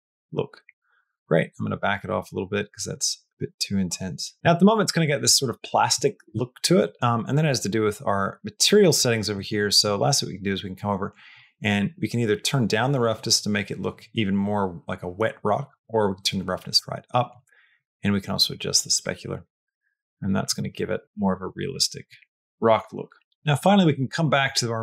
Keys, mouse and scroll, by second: 0.9 click, 1.6-4.3 drag, 4.3 middle click, 4.9 middle click, 5.2 shift+middle click, 5.9 shift+middle click, 6.8 middle click, 8.4 middle click, 9.0 middle click, 11.4-17.2 drag, 17.6-19.3 drag, 20.1 middle click, 20.6 middle click, 21.0 middle click, 22.5 shift+middle click, 23.1 middle click, 24.2 middle click.